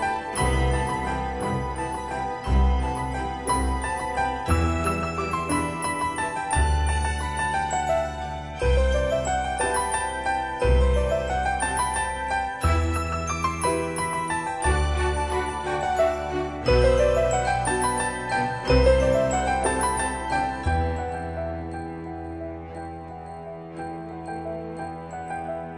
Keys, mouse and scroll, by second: 12.3 o, 12.7 Return, 14.0-14.8 typing, 16.2 7, 17.2 Return, 18.6-19.7 drag, 20.3 right click, 21.0 click, 22.1 m, 23.2 click.